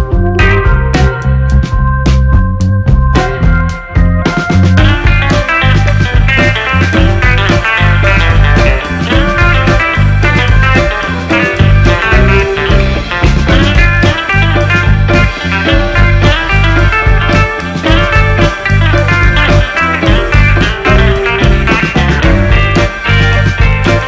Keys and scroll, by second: 2.9 4, 3.4 Return, 8.2 shift+a, 11.9 shift+a.